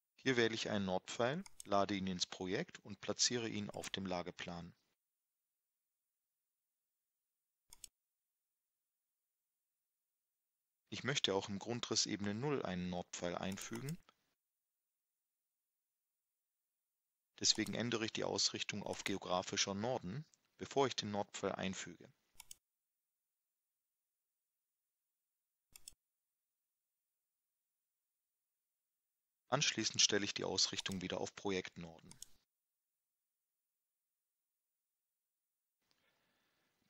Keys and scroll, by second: 10.9 Escape, 12.5 Escape, 26.8 Escape, 27.8 Escape.